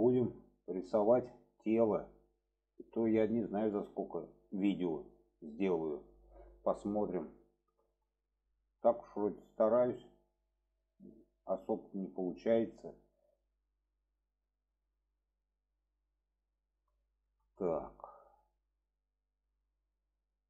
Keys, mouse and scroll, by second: 0.4 shift+middle click, 1.5 shift+middle click, 2.7 shift+middle click, 3.6 shift+middle click, 7.4-7.8 shift+middle drag, 8.3 shift+middle drag, 8.8-10.0 middle drag, 10.8-13.3 middle drag, 14.8 middle click, 16.1-16.8 alt+middle drag, 17.0 shift+middle click, 19.1 shift+middle drag.